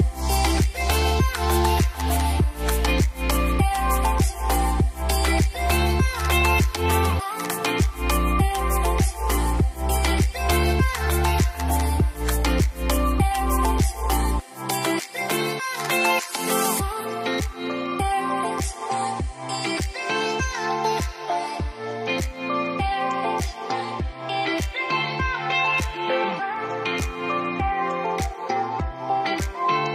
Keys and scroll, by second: 6.3-10.6 typing, 11.5 Return, 17.4-18.7 typing, 25.6 Return, 25.9-27.6 typing.